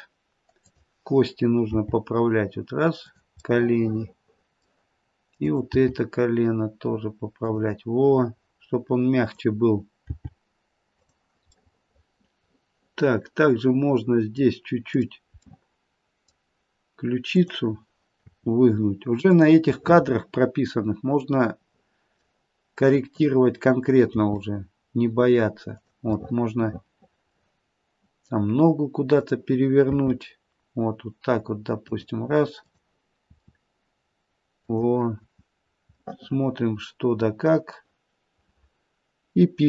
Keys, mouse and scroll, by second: 0.6 click, 1.7 g, 3.5 middle click, 5.3 click, 5.9 g, 9.1 click, 10.0 g, 11.8 middle click, 11.9 scroll down 1, 14.9-15.5 scroll up 2, 15.0 middle click, 15.5 middle click, 17.2 click, 18.2 r, 19.7 middle click, 23.0 click, 24.2 r, 26.3 middle click, 26.5 middle click, 29.1 click, 29.8 r, 32.5 click, 35.6 scroll down 1, 35.9 middle click.